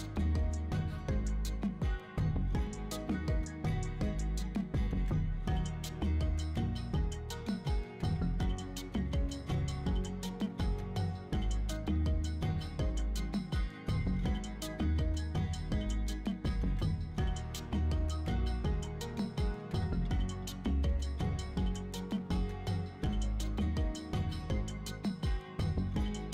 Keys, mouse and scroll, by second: 0.6 right click, 0.6 scroll down 1, 0.8 Tab, 2.8-4.9 typing, 2.9 right click, 3.8 click, 3.9 scroll up 4, 4.0 shift+middle click, 4.7 click, 6.0 click, 6.4 scroll down 3, 6.5 shift+middle click, 6.7 shift+d, 6.8 z, 7.4 click, 7.4 shift+middle click, 7.5 shift+d, 7.7 z, 8.0 click, 9.1 right click, 9.7 ctrl+z, 10.2 shift+d, 10.2 z, 10.9 click, 11.3 shift+middle click, 11.5 shift+d, 11.6 z, 11.9 click, 11.9 shift+middle click, 12.0 shift+d, 12.3 z, 12.7 click, 12.8 shift+middle click, 13.7 shift+middle click, 14.3 s, 14.4 shift+z, 15.4 click, 15.8 middle click, 16.0 middle click, 16.2 right click, 16.3 middle click, 16.4 3, 16.8 shift+right click, 17.1 shift+right click, 17.3 middle click, 17.9 shift+right click, 18.3 middle click, 18.5 shift+right click, 18.7 middle click, 19.0 1, 19.1 middle click, 19.7 alt+z, 19.9 middle click, 20.1 KP_1, 20.3 click, 20.6 s, 20.8 shift+z, 21.5 scroll up 2, 21.7 click, 22.2 s, 22.2 shift+z, 22.6 click, 22.7 middle click, 22.9 scroll down 2, 23.0 middle click, 23.2 alt+z, 23.3 shift+middle click, 23.4 Tab, 23.5 middle click, 24.2 shift+middle click, 25.3 middle click, 25.4 shift+middle click, 25.4 shift+scroll down 1, 25.5 middle click, 25.7 middle click, 26.2 middle click.